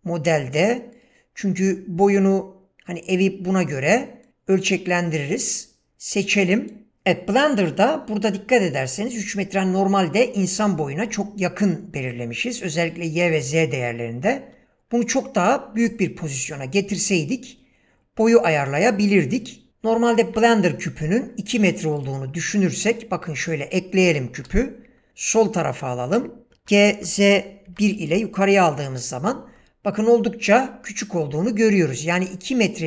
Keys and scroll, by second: 15.8 s, 20.2 shift+a, 24.4 g, 26.4-27.7 typing, 28.1 Return.